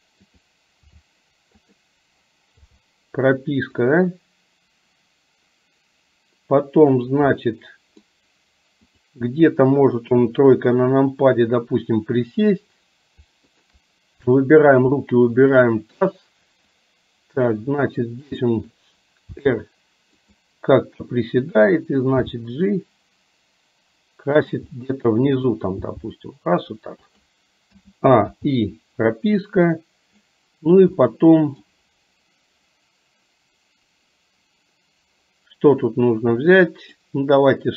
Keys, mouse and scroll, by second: 0.9 r, 2.7 i, 3.9-7.1 drag, 7.4-8.2 middle drag, 9.1 click, 10.2 KP_3, 15.6 shift+click, 16.8-18.4 drag, 19.4 r, 21.6 click, 22.3 g, 24.8 middle click, 25.9 g, 27.8 a, 28.4 i, 29.4-30.4 drag, 31.1-31.8 middle drag, 36.7 click.